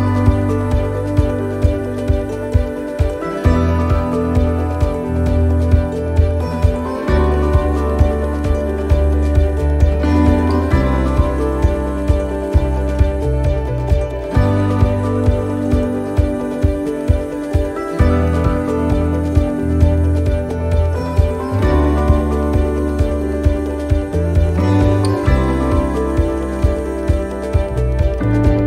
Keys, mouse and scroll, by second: 0.8 middle click, 1.7 scroll down 1, 2.1 middle click, 2.6 scroll down 1, 3.4 right click, 3.8 l, 4.6 click, 7.6 right click, 7.9 l, 8.7 click, 11.3 right click, 12.0 l, 12.7-13.0 scroll down 3, 14.7 click, 21.6 click, 23.9 scroll up 3, 24.4 middle click, 24.9 shift+middle click, 25.7 scroll up 1, 26.1 right click, 27.2 l, 28.0 click.